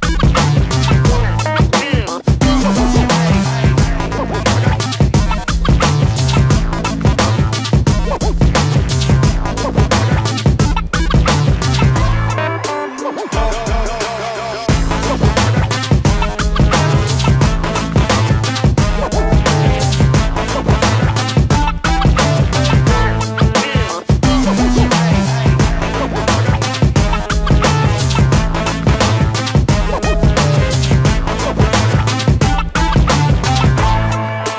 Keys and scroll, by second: 1.6 space, 4.9 s, 12.3 Escape, 14.2 p, 16.7 space, 20.8 shift+x, 22.5 Escape, 23.0 space, 23.0 Escape, 23.8 ctrl+g, 25.4 shift+x, 32.1 p.